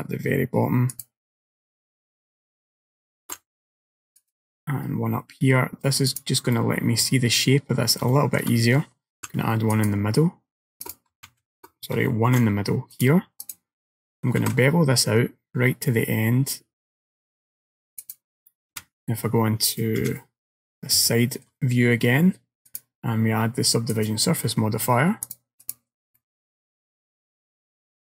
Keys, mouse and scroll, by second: 3.3 ctrl+r, 6.6 middle click, 7.6 scroll up 2, 8.2 shift+middle click, 9.2 ctrl+r, 11.3 ctrl+z, 12.4 ctrl+r, 14.5 ctrl+b, 18.8 KP_1, 20.1 KP_3, 20.8-21.1 scroll down 2, 21.1 shift+middle click, 22.7 click, 25.3 click, 26.2 middle click.